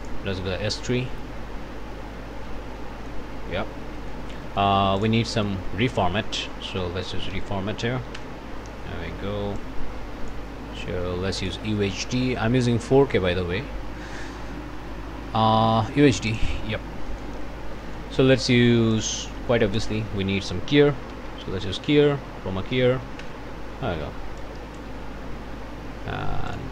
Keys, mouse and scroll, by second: 0.0 click, 0.4 click, 1.3 scroll down 1, 1.9-2.3 scroll down 1, 2.5 click, 3.3 scroll down 1, 4.0 click, 4.4 click, 5.0 click, 5.3 click, 5.8 Tab, 7.1 Down, 8.2 Return, 9.6 click, 11.4 click, 16.3 click, 17.1 click, 17.2-17.7 scroll up 1, 17.8 click, 18.5 click, 19.4 click, 20.0 Tab, 20.0 click, 20.9-21.9 typing, 22.2 Down, 22.9 Up, 23.3 Return, 24.4 ctrl+click, 26.6 ctrl+click.